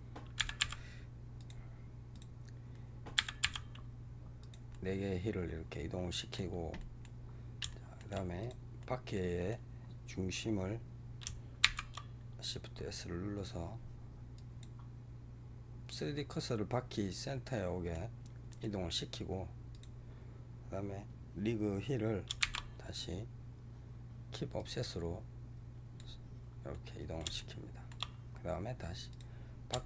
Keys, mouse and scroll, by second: 0.3 g, 2.0 click, 3.0 g, 4.6-7.2 middle drag, 7.2 scroll up 1, 7.6-8.3 shift+middle drag, 8.3 click, 8.7-9.7 middle drag, 9.7 scroll up 2, 10.3-11.5 scroll down 1, 11.5 shift+s, 17.4 middle click, 17.8-18.4 scroll down 1, 18.4 middle click, 18.7-19.6 scroll up 1, 19.6 click, 22.3 shift+s, 26.6-28.0 middle drag, 28.0-29.0 scroll up 2, 29.0 click.